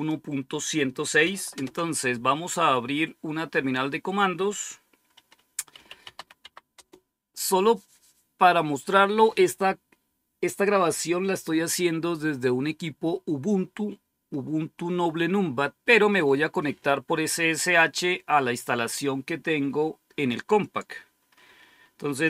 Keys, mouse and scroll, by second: 0.0 click, 1.5 super+Return, 5.4-6.5 typing, 6.6 Return.